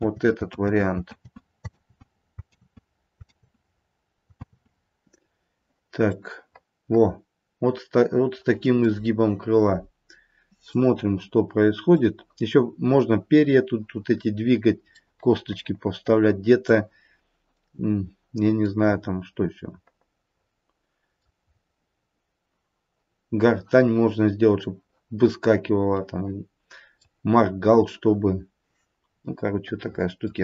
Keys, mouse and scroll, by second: 0.0 ctrl+z, 1.1 ctrl+z, 1.8 ctrl+z, 2.5 ctrl+z, 3.3 ctrl+z, 4.4 ctrl+z, 6.0 middle click, 10.9 middle click, 15.0 middle click, 16.4 middle click, 19.4 middle click, 21.0 middle click, 21.4-22.0 scroll up 2, 24.1-24.6 scroll up 1, 26.0 middle click, 26.8 middle click, 29.2 middle click, 29.9 middle click, 30.0 middle click.